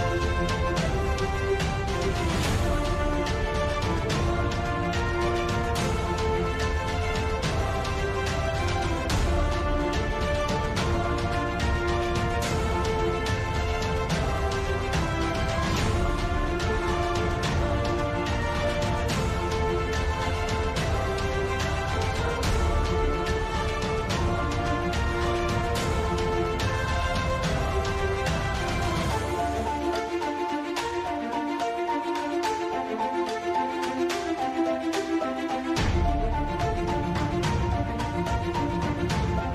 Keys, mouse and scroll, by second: 0.2 KP_5, 1.3 click, 2.5-3.0 middle drag, 3.0 Tab, 3.1 middle click, 4.0 right click, 4.4 right click, 5.0 s, 5.5 click, 6.1 KP_5, 6.2 KP_1, 6.4 KP_3, 7.4 g, 9.0 g, 10.0 x, 11.0 g, 11.6 click, 12.3 w, 15.5 middle click, 15.5 g, 16.4 g, 17.1 middle click, 17.4 click, 18.3-19.5 drag, 18.8 g, 19.6-20.8 drag, 19.9 g, 21.1 click, 21.2-24.8 typing, 22.5-23.8 drag, 24.6 click, 26.2 e, 27.9 e, 29.3 e, 30.6 KP_5, 30.9 Tab, 31.3 ctrl+2, 32.0 Tab, 32.6 a, 32.7 a, 32.8 n, 33.2 click, 34.7 click, 35.1 Tab, 35.5 click, 36.2 click, 37.0 click, 38.1 ctrl+alt+shift+c, 38.8 ctrl+z, 39.4 Tab.